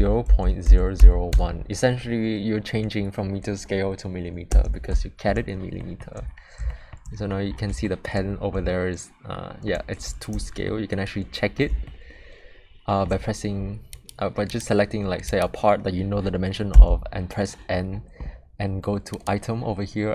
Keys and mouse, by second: 5.8 shift+middle drag, 6.7 shift+middle drag, 7.8 shift+middle drag, 8.7-9.7 shift+middle drag, 10.6-11.5 ctrl+middle drag, 11.8-13.0 shift+middle drag, 13.9 click, 14.5 click, 15.3 click, 16.7 n.